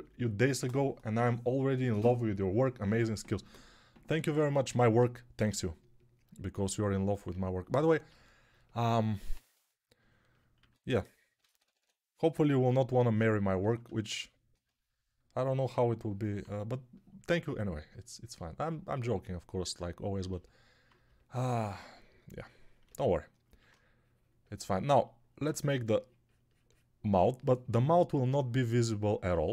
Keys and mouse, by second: 5.2 g, 9.3 2, 10.4-11.7 typing.